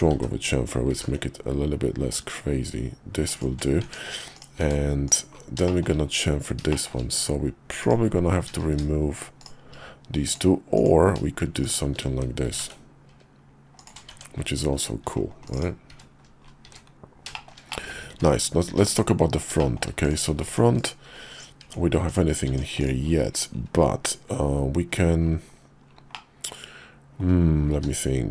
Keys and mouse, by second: 0.1 ctrl+z, 0.9 ctrl+b, 3.8 Tab, 4.3 click, 4.6 Tab, 5.0 click, 5.7 shift+click, 6.7 shift+click, 7.8 click, 9.4 shift+click, 10.2 click, 10.7 click, 11.6 shift+click, 12.4 ctrl+b, 14.1 Tab, 15.4 click, 15.6 click, 15.9 `, 16.7 `, 17.3 shift+middle click, 17.7 middle click, 18.1 `, 18.7 `, 19.6 shift+middle click, 20.0 click, 21.6 Tab, 22.0 click, 22.5 Tab, 22.8 click, 26.1-27.2 middle drag, 27.7 q.